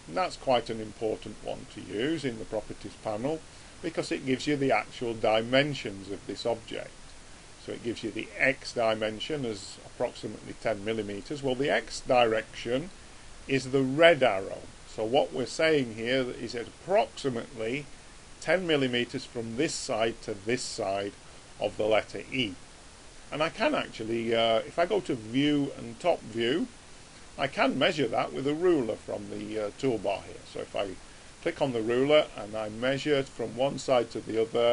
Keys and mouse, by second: 0.5-2.5 middle drag, 10.9-13.3 middle drag, 24.9 click, 29.9 click.